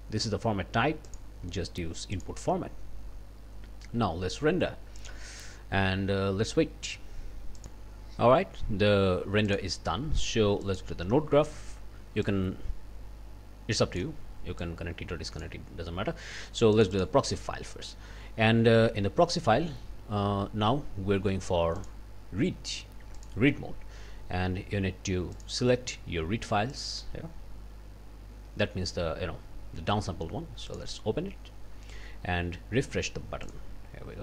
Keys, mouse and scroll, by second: 1.1 click, 2.1 click, 5.0 click, 7.6 click, 9.5 click, 10.7 click, 11.3-14.2 drag, 14.6-15.6 drag, 16.7 click, 21.8 click, 23.2 click, 25.3 click, 26.7 click, 30.7 click, 33.5 click.